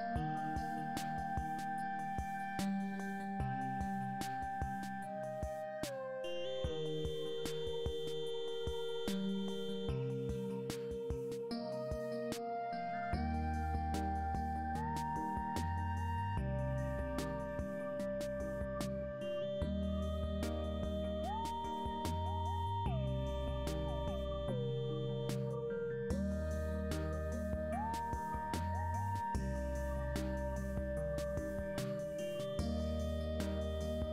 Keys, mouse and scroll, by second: 4.8 click, 6.2 g, 11.5 r, 18.1 click, 19.0 r, 25.2 r, 33.7 g.